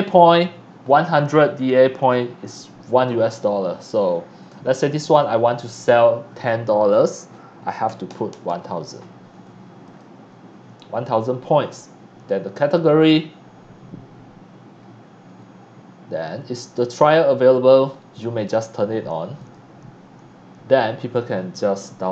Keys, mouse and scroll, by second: 4.4 click, 8.0 KP_0, 8.5 KP_0, 9.8 click, 11.6 scroll down 1, 19.3 click.